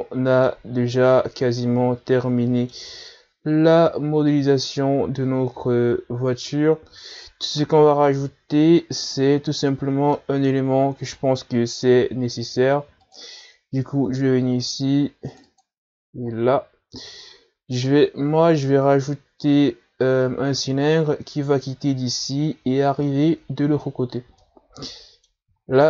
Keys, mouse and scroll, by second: 0.3 scroll down 1, 0.5 a, 0.9 scroll down 1, 1.1-2.0 middle drag, 2.0 scroll up 2, 2.8-5.9 middle drag, 6.8-7.6 scroll up 1, 7.6-8.1 scroll up 1, 8.1-9.0 scroll down 1, 9.0-9.4 scroll down 1, 9.4 KP_Divide, 10.9-14.3 middle drag, 14.3-17.1 drag, 20.4-21.0 scroll up 1, 25.6-25.8 middle drag.